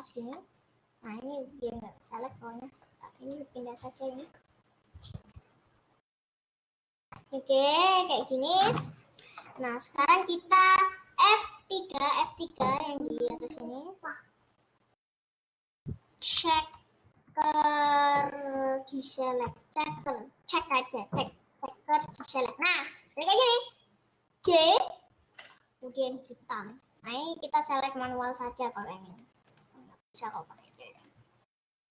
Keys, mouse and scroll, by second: 0.3-6.8 middle drag, 6.8-7.2 scroll up 4, 7.2-9.7 middle drag, 9.7-10.1 scroll down 4, 10.1 middle click, 10.5-11.6 scroll up 2, 22.2-24.5 middle drag, 24.5 g, 26.8 click, 27.1-27.6 scroll up 4, 27.9 click, 28.8 shift+click, 29.3 shift+click, 29.7 shift+click, 31.1 shift+click, 31.6 shift+click.